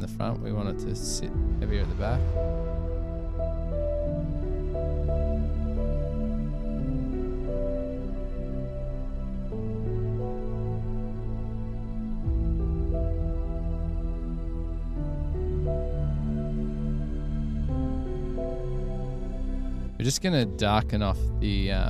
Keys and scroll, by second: 3.1 super+=, 11.1 super+=.